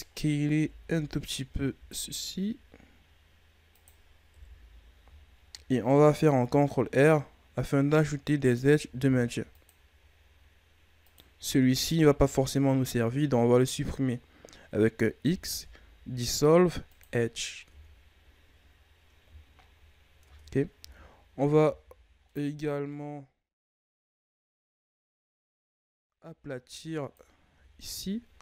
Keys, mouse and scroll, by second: 0.5 KP_1, 1.7 s, 4.3 KP_3, 5.3-6.3 shift+scroll up 2, 6.3 ctrl+r, 8.9 ctrl+r, 11.7 alt+right click, 15.1 x, 17.6 Tab, 18.0-19.5 scroll down 1, 19.5-20.1 shift+scroll up 3, 20.1 Tab, 20.7 z, 21.5 z, 22.2-23.5 middle drag, 23.5 KP_3, 24.0 z, 25.2 right click, 25.4 b, 27.4 z.